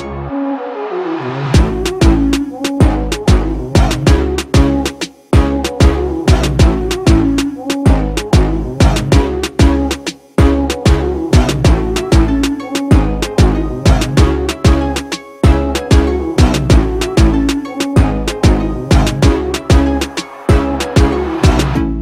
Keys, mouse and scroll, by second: 11.5 ctrl+-, 12.1 ctrl+-, 21.4 alt+shift+click.